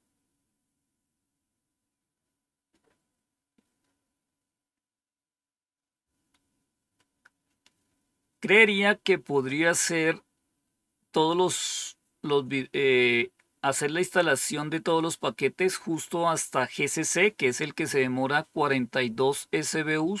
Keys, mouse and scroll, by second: 8.4-9.5 scroll down 1, 9.5-20.2 scroll down 1.